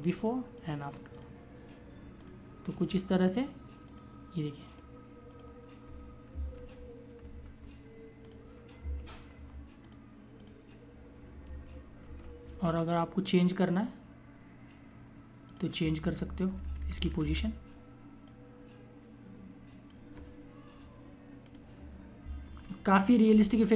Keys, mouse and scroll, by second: 6.4 ctrl+=, 6.7 ctrl+-, 7.7 click, 8.8 ctrl+=, 9.7 click, 11.8 ctrl+=, 15.3 click, 15.6 Down, 17.2 click, 22.6 ctrl+=, 23.2 click.